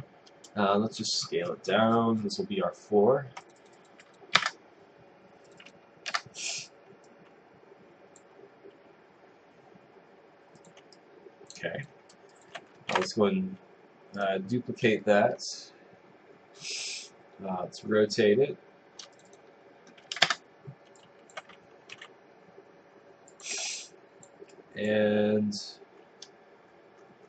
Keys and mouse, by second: 4.4 Return, 6.1 Return, 7.1 click, 8.9 w, 10.6 click, 11.0 click, 12.3 click, 14.2 right click, 20.3 Return, 21.0 click, 21.7-22.5 typing, 23.3 click, 24.5 click.